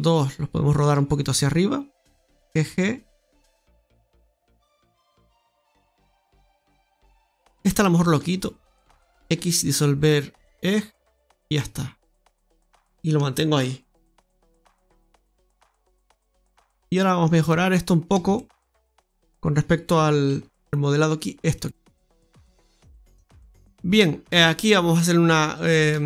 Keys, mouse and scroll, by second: 0.2 right click, 0.6 shift+right click, 2.4 g, 4.2 ctrl+z, 4.5-5.4 scroll up 3, 5.4 alt+shift+right click, 5.8 alt+shift+right click, 7.0 alt+shift+right click, 7.6 right click, 8.0 alt+shift+right click, 9.1 x, 11.0-11.3 scroll down 4, 11.5 middle click, 14.3 middle click, 17.3 Tab, 17.7 Tab, 17.7 scroll up 1, 18.2 shift+middle click, 18.8 shift+middle click, 18.8-19.8 scroll up 1, 20.2 ctrl+r, 21.8-22.4 scroll down 3, 22.6 middle click, 23.7 middle click, 24.2 Tab, 25.5 right click, 25.8 alt+shift+right click.